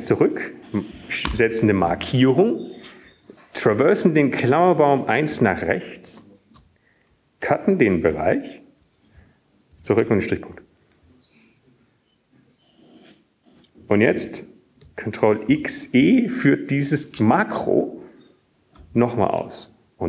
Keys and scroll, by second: 3.6 Left, 4.2 ctrl+space, 11.7 ctrl+w, 13.2 BackSpace, 18.9 ctrl+x.